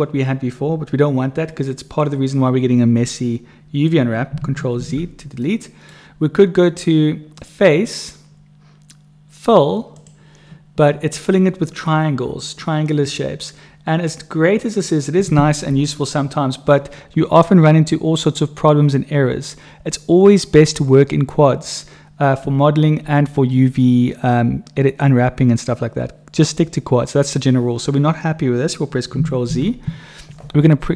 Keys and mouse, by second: 4.7 ctrl+z, 5.4 click, 5.7 right click, 7.4-10.1 drag, 7.4-10.1 right drag, 28.0 click, 29.4 ctrl+z.